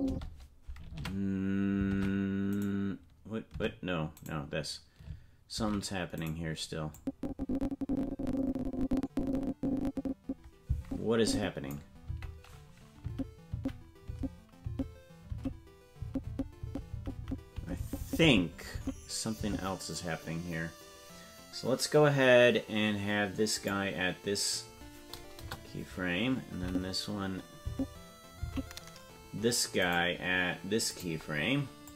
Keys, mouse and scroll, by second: 0.0 space, 0.9 Tab, 1.9 ctrl+Tab, 3.6 Tab, 4.2 right click, 5.6 ctrl+Tab, 6.2 right click, 6.9-11.7 drag, 13.1 Right, 13.5 Right, 14.1 Left, 14.7 Right, 15.3 Left, 16.0 Right, 16.3 Right, 16.6 Right, 16.9 Right, 17.2 Right, 17.6 Left, 17.8 Left, 18.0 Left, 18.2 Left, 18.7 Left, 19.4 Right, 23.5-26.0 drag, 26.6 Right, 27.7 Left, 28.4 Left, 29.8 right click, 30.9-31.9 drag.